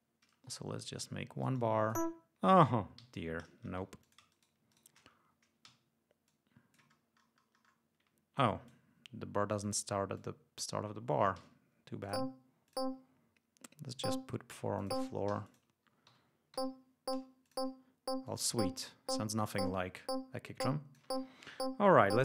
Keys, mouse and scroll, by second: 2.1-2.4 ctrl+scroll up 2, 2.9 ctrl+g, 3.7 shift+e, 3.9 shift+click, 4.2 shift+right click, 4.6 shift+right click, 5.6 g, 6.2 click, 8.3-8.8 drag, 9.5 click, 10.1 click, 11.3 d, 11.9 click, 12.6 click, 13.8 click, 14.7 click, 15.2 g, 15.4 click, 16.5 l, 17.4 click, 18.2 click, 19.5-21.1 drag.